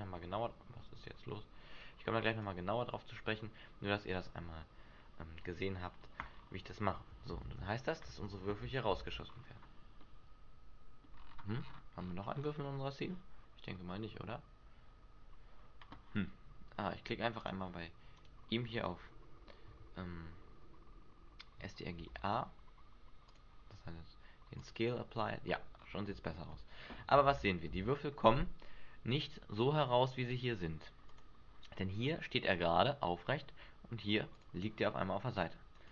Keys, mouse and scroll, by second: 6.2-7.4 scroll up 7, 7.4 alt+a, 9.0 alt+a, 9.5-9.9 scroll up 6, 9.9 middle click, 11.1-12.4 scroll down 15, 12.3-13.6 scroll up 6, 13.6 scroll up 2, 13.7 scroll down 1, 15.1 scroll up 1, 17.4 click, 18.1 right click, 21.9 ctrl+a, 24.6 click, 25.2-25.8 scroll down 1, 25.8 scroll up 4, 27.2 alt+a, 27.7 alt+a, 28.1 middle click, 31.0 click, 34.3 click, 35.8 right click.